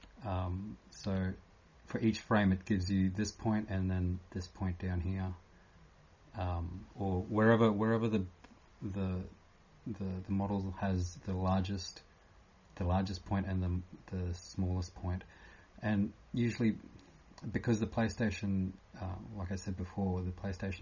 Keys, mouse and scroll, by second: 1.3 typing, 2.4 typing.